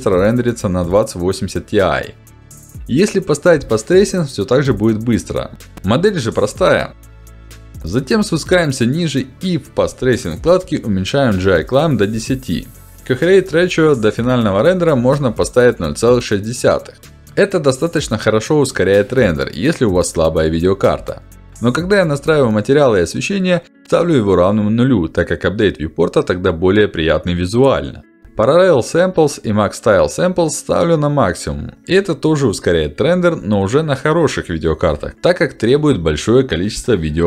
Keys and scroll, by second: 12.1 Return, 14.8 BackSpace, 15.4 6, 15.8 Return, 27.3 BackSpace, 28.1 6, 28.2 Return.